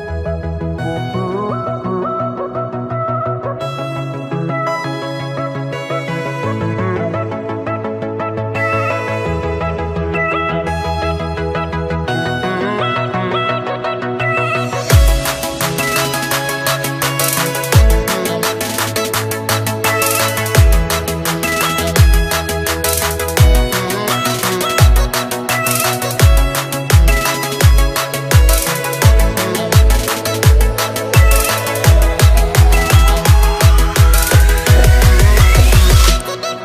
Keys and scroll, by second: 1.2 ctrl+j.